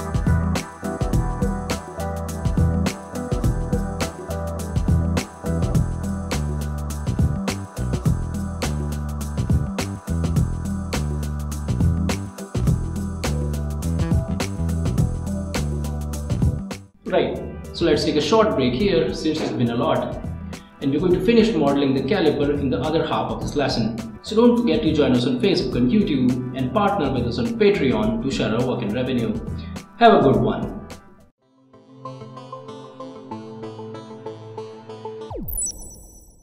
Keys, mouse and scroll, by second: 0.7 right click, 1.2-1.6 scroll up 2, 1.3 middle click, 1.7 middle click, 2.3 click, 2.6-2.9 scroll down 1, 2.9 click, 3.8 click, 4.9-5.2 scroll down 1, 5.2 scroll up 1, 5.8 click, 6.2 middle click, 6.9 click, 7.5 click, 8.3 click, 8.6 middle click, 8.6 scroll down 1, 9.5 click, 10.6 click, 11.9 click, 13.3 click, 13.9 click, 14.7 click, 15.4 right click, 15.8 scroll up 1, 15.9 middle click, 16.6 ctrl+s.